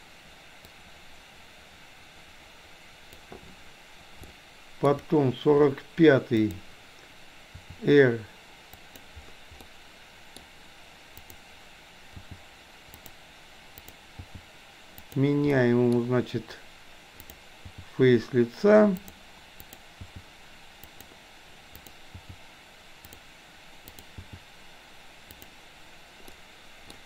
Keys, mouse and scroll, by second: 0.7-3.3 drag, 4.3-4.8 shift+middle drag, 6.4 click, 7.6 r, 9.7-10.4 middle drag, 11.2 click, 12.2 g, 13.8 click, 14.3 g, 15.6-17.3 middle drag, 15.6-16.0 scroll up 1, 16.0-17.3 scroll down 1, 17.3 click, 17.7 g, 19.7 click, 20.1 g, 21.8 click, 22.2 g, 23.9 click, 24.2 g, 26.3-27.0 middle drag.